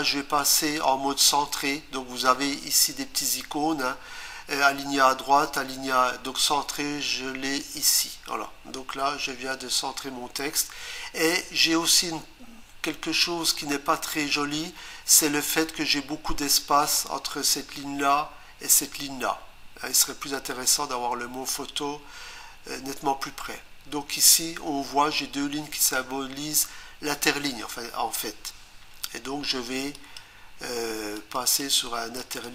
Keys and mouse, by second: 8.0 click, 29.9 click, 31.1 click, 31.5 click, 32.2 click, 32.4 click.